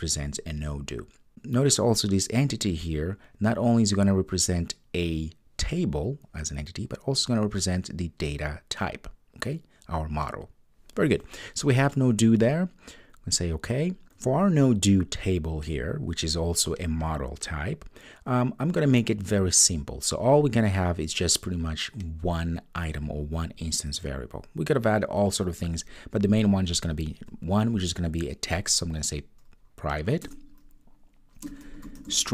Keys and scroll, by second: 30.2 Return.